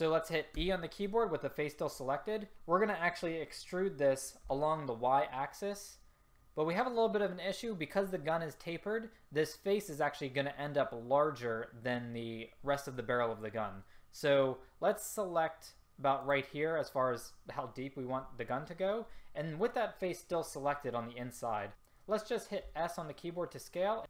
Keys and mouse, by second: 0.7 e, 22.8 s.